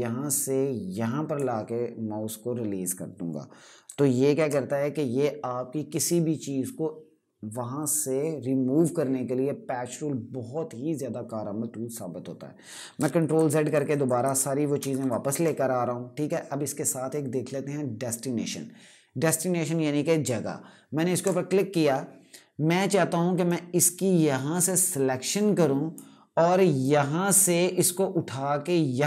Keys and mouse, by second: 4.1 d, 12.7 ctrl+Num_Lock, 12.9 ctrl+z, 13.1 ctrl+z, 13.3 ctrl+z, 13.4 ctrl+z, 13.6 ctrl+z, 13.8 ctrl+z, 13.9 ctrl+z, 14.5 ctrl+z, 14.7 ctrl+z, 15.8 typing, 17.0 typing, 20.9 click, 23.4 click.